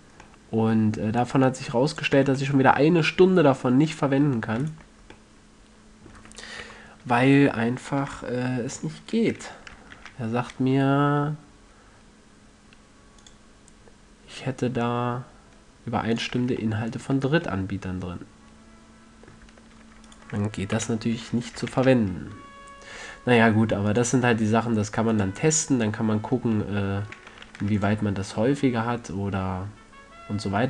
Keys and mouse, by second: 0.5 middle click, 0.7 drag, 0.9 click, 1.0 middle drag, 1.5 middle click, 2.5-3.3 drag, 2.5 a, 4.9-6.9 middle drag, 7.0 KP_3, 10.3 ctrl+e, 16.5-18.7 drag, 16.7 a, 17.5 Tab, 19.8 Tab, 20.4-22.2 middle drag, 21.1 KP_3, 22.1 ctrl+e, 25.5-26.9 drag, 26.9-27.5 middle drag, 27.9 ctrl+r.